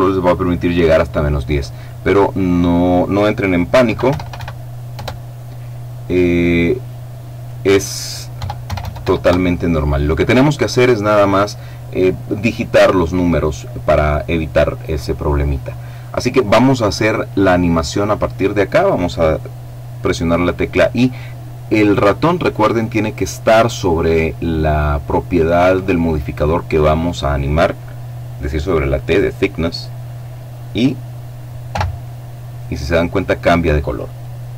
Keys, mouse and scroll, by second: 3.5 KP_Decimal, 3.7 KP_0, 4.0 KP_1, 4.6 KP_Enter, 7.0 click, 8.0 KP_Decimal, 8.3 KP_0, 8.7 KP_1, 8.9 KP_Enter, 31.3 i.